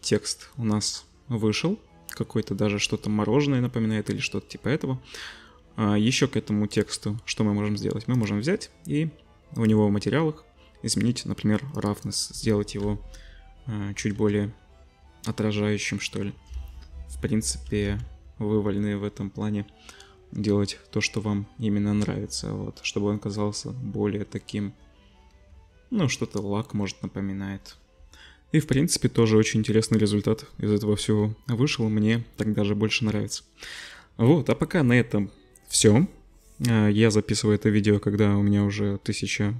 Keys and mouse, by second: 8.1 click, 8.2-9.6 middle drag, 9.6 click, 9.7-11.9 middle drag, 11.9-39.5 drag, 17.8 z, 25.3 z.